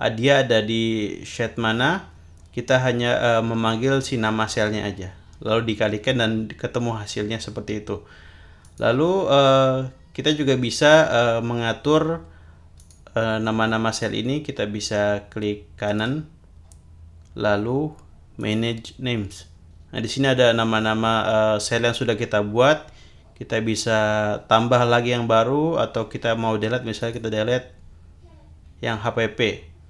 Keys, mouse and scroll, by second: 8.6 click, 12.8 click, 13.9 click, 15.9 right click, 18.4 click, 27.0 click.